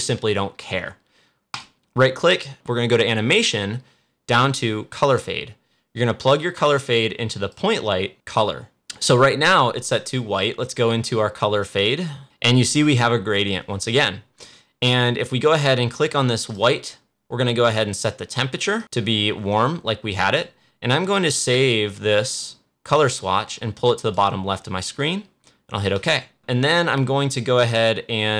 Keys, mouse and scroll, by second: 1.5 right click, 5.0-8.1 drag, 8.2 click, 12.2 click, 16.4 click, 18.7-25.9 drag.